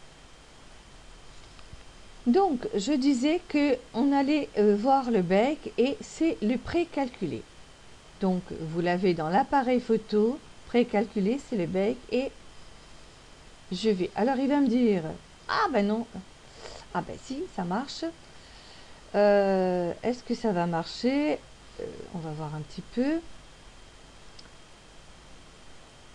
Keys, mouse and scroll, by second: 14.4 click, 23.9-24.6 scroll up 1, 25.1-26.0 scroll up 1.